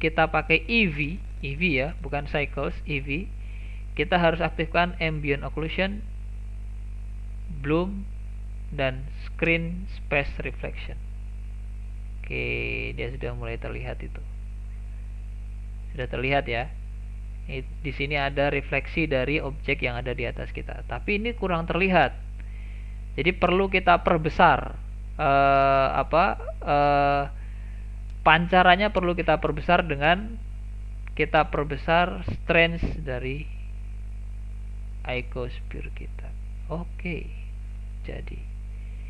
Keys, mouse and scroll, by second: 0.4-4.9 drag, 7.4 click, 9.3 click, 11.5-12.2 scroll up 4, 12.2-15.8 middle drag, 22.0-23.7 middle drag, 23.7 click, 24.4 click, 25.1 click, 25.9 click, 27.4-27.9 scroll up 8, 27.9 shift+middle click, 28.4-28.9 scroll up 7, 28.9-31.7 shift+middle drag, 31.7-34.8 drag, 37.0-37.3 scroll down 1, 37.3-39.0 middle drag.